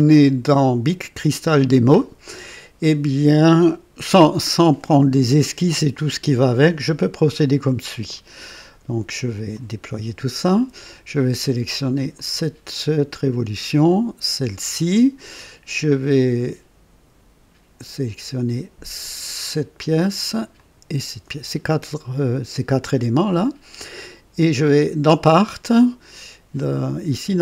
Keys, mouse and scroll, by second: 8.0 click, 9.4 click, 12.0 click, 13.8 ctrl+click, 18.9 ctrl+click, 20.5 ctrl+click.